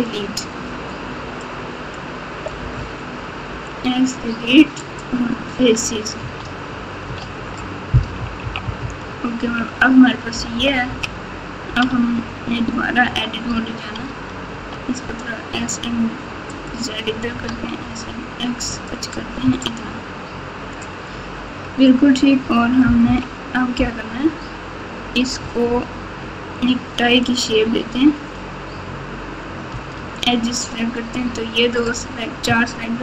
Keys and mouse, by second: 1.5 click, 3.4 x, 6.2 Tab, 7.2 alt+z, 8.1-10.8 typing, 11.8 Tab, 13.0 Tab, 14.5 s, 17.2 s, 19.4 Tab, 23.0 Tab, 23.0 KP_1, 26.6 Tab, 27.6 alt+z, 29.7 2, 30.3 click.